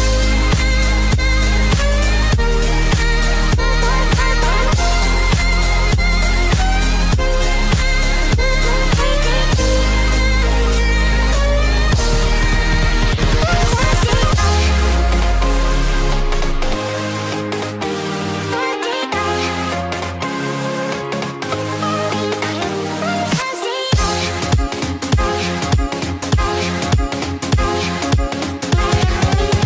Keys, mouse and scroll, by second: 0.9 click, 2.2 click, 2.3 x, 3.4 scroll down 2, 3.7 middle click, 5.4 scroll up 2, 5.6 middle click, 6.2 click, 6.9 scroll up 1, 8.3 scroll up 1, 10.9 e, 13.1 click, 14.5 click, 14.7 click, 14.8 x, 15.5 middle click, 16.9 click, 18.9 ctrl+b, 22.7 click, 22.9 scroll down 2, 23.6 scroll down 1, 23.7 middle click, 25.0 middle click, 26.0 KP_3.